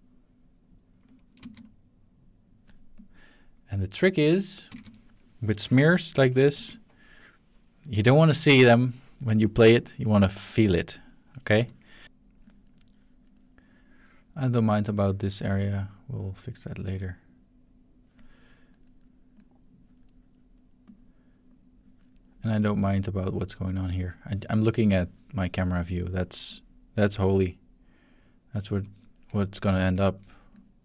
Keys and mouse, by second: 1.4 space, 3.0 click, 4.7 space, 6.5 ctrl+s, 12.0 shift+click, 15.7-18.1 drag, 19.4 click, 20.2-23.3 drag, 23.8-25.7 middle drag, 26.4-29.8 drag, 29.0-29.8 ctrl+middle drag, 30.5 click.